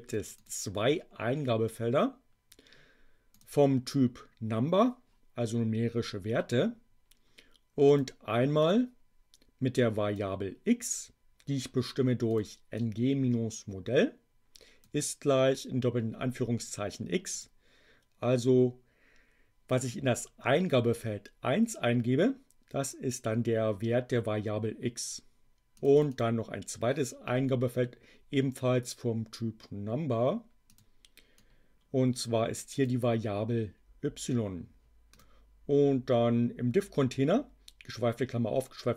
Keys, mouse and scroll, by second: 3.4 click, 7.8 click, 8.6-10.2 drag, 12.2 click, 12.7-14.9 drag, 17.3 click, 25.7 click, 30.6 click, 31.3-33.0 drag, 35.0 click.